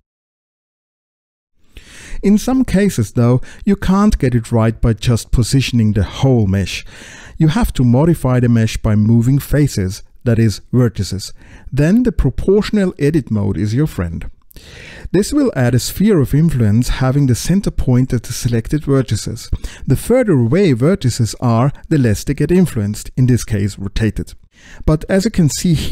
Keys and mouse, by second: 0.0 KP_Decimal, 0.5 middle click, 1.5 middle click, 1.8 Delete, 2.5 ctrl+alt+x, 3.0-6.9 typing, 3.2 middle click, 3.5 middle click, 3.7 middle click, 4.4 click, 5.0 click, 5.2 click, 5.4 click, 6.3 click, 6.7 alt+z, 6.7 click, 7.0 click, 7.3 click, 8.0 s, 8.1 click, 8.5 space, 8.8 r, 9.0 x, 9.2 click, 9.5 click, 9.9 click, 10.2 click, 10.7 middle click, 11.5 Tab, 11.7 middle click, 11.8 click, 12.1 click, 12.4 ctrl+click, 12.5 click, 13.0 click, 13.1 click, 13.6 click, 13.9-16.4 middle drag, 19.4-21.2 drag, 22.8-24.8 middle drag.